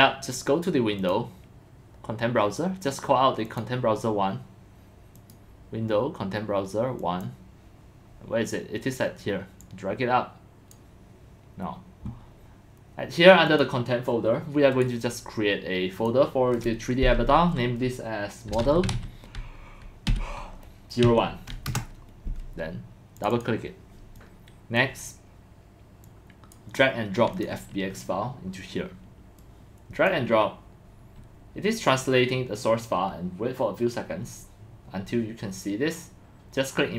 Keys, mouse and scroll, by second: 1.0 click, 3.4 click, 5.2 click, 7.0 click, 7.6 click, 9.6-10.7 drag, 13.5 click, 15.9 click, 17.3-18.5 drag, 18.3-23.4 typing, 23.2 click, 23.3 click, 24.2 click, 25.6 click, 27.4 click, 29.4 click.